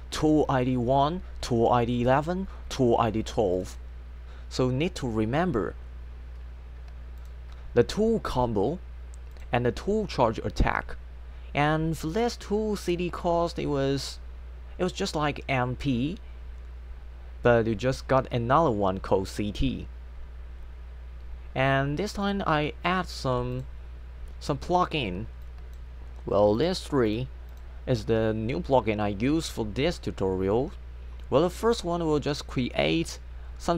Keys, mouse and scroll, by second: 3.5 click, 7.2 click, 9.4 click, 12.2 click, 23.6 click, 25.4 click, 26.6 click, 27.1 click, 27.5 click, 31.7 click.